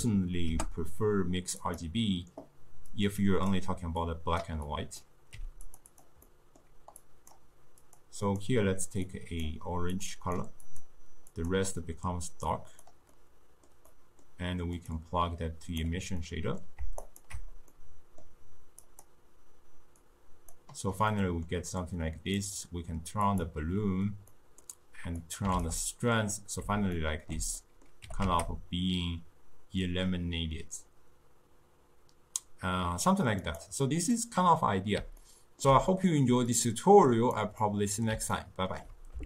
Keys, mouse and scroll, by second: 3.0-5.4 drag, 5.4 g, 6.0 click, 6.3-7.1 middle drag, 7.1 click, 7.9 click, 8.3 click, 11.4 click, 14.0-15.0 middle drag, 15.0-16.3 drag, 16.3-17.3 middle drag, 17.3 ctrl+shift+click, 17.8-18.9 middle drag, 18.9 click, 21.2-22.5 middle drag, 22.5 click, 23.3 click, 24.4 middle click, 25.3 click, 27.0-28.1 ctrl+middle drag, 28.1 g, 34.2-36.5 middle drag, 36.5-37.7 drag, 37.7-39.2 middle drag.